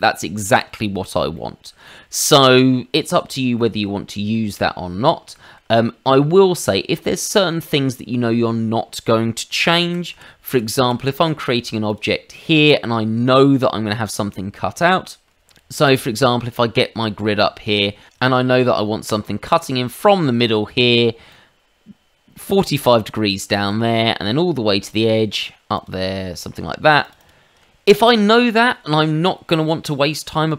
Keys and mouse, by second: 1.3 middle click, 1.8 shift+middle click, 3.6 middle click, 5.3 shift+middle click, 9.8 ctrl+z, 10.1 ctrl+z, 10.5 ctrl+z, 10.8 ctrl+z, 11.8 click, 12.6 shift+middle click, 13.3 shift+middle click, 21.3 ctrl+click, 24.9 ctrl+click, 25.8 ctrl+click, 26.9 ctrl+click, 27.0 ctrl+click, 27.2 ctrl+click, 28.1 middle click.